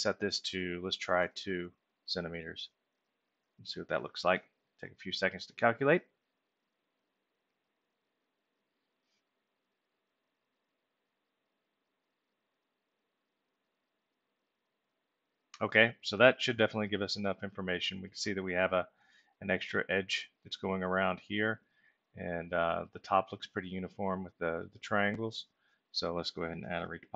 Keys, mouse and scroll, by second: 17.5 alt+middle click, 21.9 alt+middle click, 23.7-25.2 middle drag, 25.3 alt+middle click.